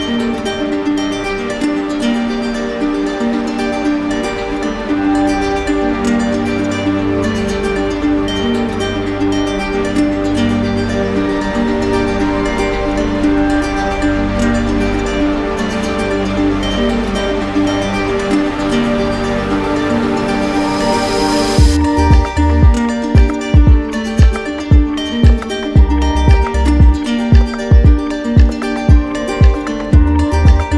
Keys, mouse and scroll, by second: 0.5 right click, 1.4 shift+click, 2.0 shift+click, 2.4 shift+click, 2.8 shift+click, 3.0 shift+click, 3.3 shift+click, 3.7 click, 4.6 shift+click, 4.8 click, 5.1 click, 5.7 click, 6.0 shift+click, 6.6 alt+click, 7.2 right click, 7.9 shift+click, 8.3 shift+click, 8.4 shift+click, 9.4 shift+click, 9.7 shift+click, 10.2 shift+click, 10.4 shift+click, 11.5 alt+right click, 12.1 shift+click, 13.0 right click, 14.5 right click, 14.8 shift+click, 15.4 right click, 15.7 click, 16.4 click, 16.9 click, 17.6 shift+click, 17.9 shift+click, 18.2 shift+click, 20.8 click, 21.2 shift+click, 22.0-24.4 shift+drag, 27.6 click, 28.6 click, 29.1 shift+click, 29.8 shift+click.